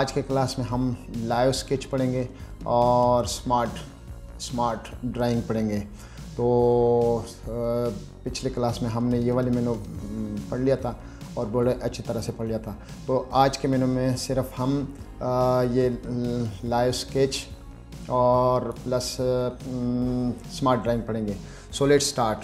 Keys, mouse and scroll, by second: 10.6 middle click, 14.6-16.1 middle drag, 17.2 middle click, 18.3 click.